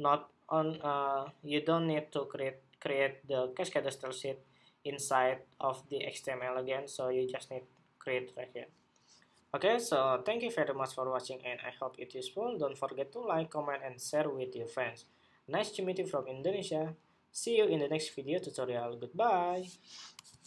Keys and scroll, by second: 20.3 shift+super+2.